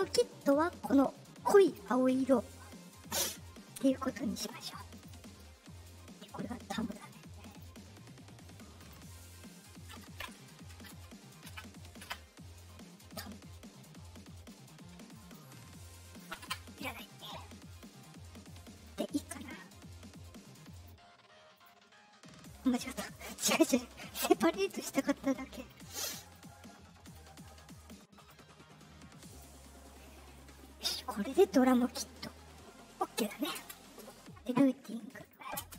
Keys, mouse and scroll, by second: 2.4 scroll down 2, 4.9 click, 7.4 click, 8.7 click, 14.3 middle click, 15.1 click, 15.8 click, 16.4 Return, 18.7 right click, 20.7 click, 21.5 click, 22.9 right click, 25.5 click, 26.2 right click, 27.0 right click, 27.7 right click, 28.1 right click, 29.2 click, 33.3 space, 33.5 space, 35.2 click, 35.5 space.